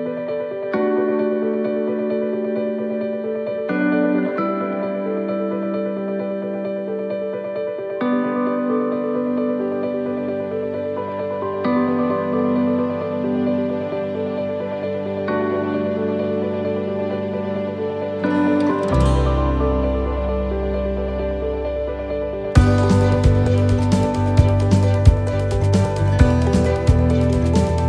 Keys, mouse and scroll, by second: 3.2 middle click, 4.2 s, 6.4 click, 7.6 s, 13.2 middle click, 13.6 shift+middle click, 14.1-14.4 scroll up 2, 14.5 shift+middle click, 14.9-15.4 scroll up 1, 15.8 right click, 16.4 alt+shift+right click, 18.9 e, 21.3 ctrl+z, 22.3 click, 26.1 click, 26.1 e, 27.7 click.